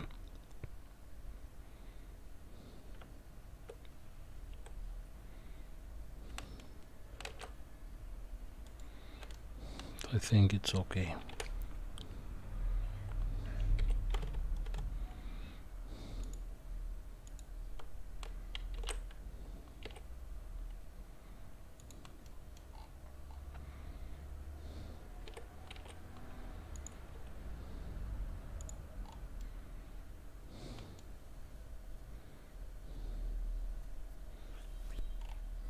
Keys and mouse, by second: 3.0 Tab, 4.5 s, 9.3-10.3 middle drag, 11.3 r, 16.2 click, 17.3 click, 18.8 shift+d, 22.2-22.6 middle drag, 25.2 g, 27.1 s, 29.4-31.0 middle drag.